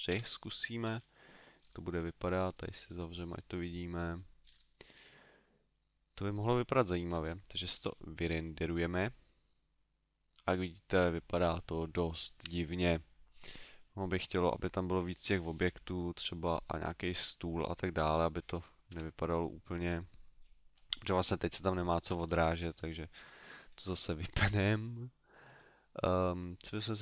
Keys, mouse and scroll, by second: 0.8-1.4 scroll up 4, 1.4 scroll down 1, 1.6-2.5 scroll down 2, 2.5 click, 2.5 scroll down 2, 3.2 click, 4.4-5.6 scroll up 7, 5.7 middle click, 18.9 Escape, 22.2 click, 22.7 click, 25.4-27.0 scroll down 5.